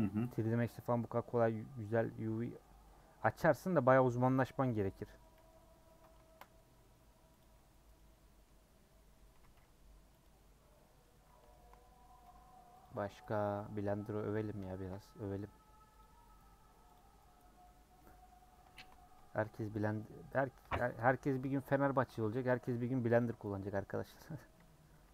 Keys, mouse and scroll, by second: 0.6 u, 0.8-3.3 middle drag, 3.3 scroll up 1, 3.6 scroll down 1, 3.9-5.5 middle drag, 5.5-5.8 scroll up 1, 5.8-7.4 middle drag, 7.4 click, 7.9 middle click, 8.5 scroll up 3, 9.3 a, 10.4 u, 10.7 middle click, 11.2-11.5 scroll up 1, 11.5-12.8 shift+middle drag, 12.8 alt+click, 13.3-14.1 scroll down 5, 13.5 middle click, 14.1 middle click, 14.9-15.4 scroll up 2, 16.0 alt+click, 16.9 click, 17.5 scroll down 1, 17.6 middle click, 18.3 scroll up 3, 19.8 click, 20.7 shift+middle click, 21.0 scroll down 1, 21.3 middle click, 22.2 a, 23.3 u, 24.2 scroll down 1, 24.3 middle click, 25.0 Tab.